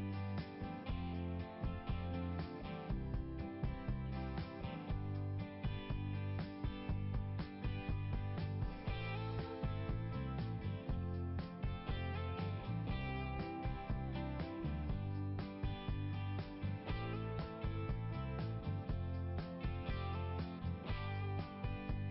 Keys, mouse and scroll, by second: 0.5 click, 1.9 click, 2.4 BackSpace, 3.4-5.2 typing, 7.7 click, 8.0 click, 8.2 click, 8.6 click, 9.1 BackSpace, 9.2 9, 9.4 BackSpace, 9.5 9, 12.0 click, 12.2 click, 12.4 click, 12.8-14.6 typing, 19.4 Return, 20.6 click.